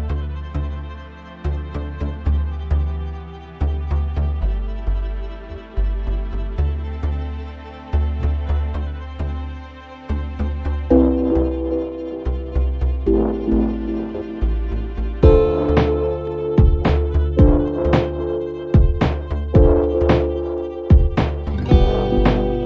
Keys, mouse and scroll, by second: 0.2-3.4 drag, 4.0-5.9 drag, 6.5 click, 8.5 click, 10.1 click, 11.8 click, 13.1 click, 15.2-16.5 typing, 18.9 click, 19.6-21.2 typing, 22.2 click.